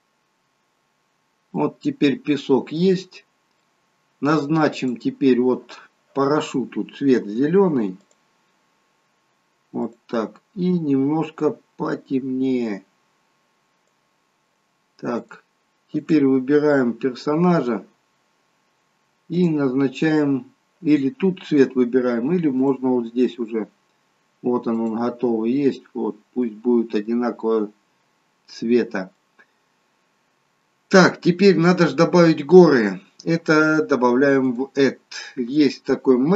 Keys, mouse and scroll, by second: 1.6 middle click, 3.2 scroll down 1, 3.6 middle click, 4.7 click, 7.9 click, 15.3 click, 16.0 click, 16.7-17.1 scroll up 5, 17.4 click, 19.4 click, 23.9 click, 25.9-26.3 scroll down 3, 26.5 middle click, 28.6 scroll down 1, 29.2 middle click, 31.4 middle click, 34.4 click.